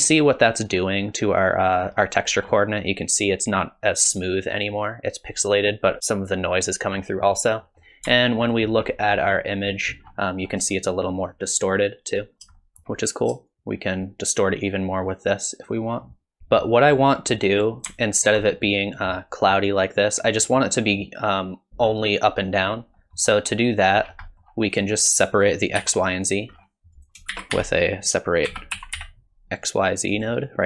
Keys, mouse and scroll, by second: 1.9-2.3 scroll up 4, 2.3-3.6 scroll down 3, 7.0 middle click, 7.6 middle click, 8.5 ctrl+shift+click, 10.0-10.6 scroll down 3, 10.4 scroll up 1, 12.6 shift+middle click, 13.5 shift+click, 16.4 middle click, 16.4 click, 18.1 ctrl+shift+click, 23.0 middle click, 24.1-24.5 scroll down 4, 24.3 middle click, 24.7 click, 25.8 g, 26.6-27.0 scroll up 5, 27.0 click, 27.3 shift+a.